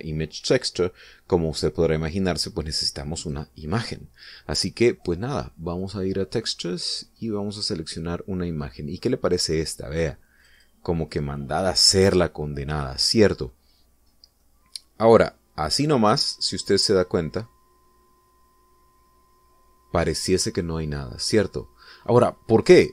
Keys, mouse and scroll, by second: 4.2 click, 6.8 click, 7.9 click, 11.4 click, 15.0 scroll down 2, 15.4-22.9 middle drag.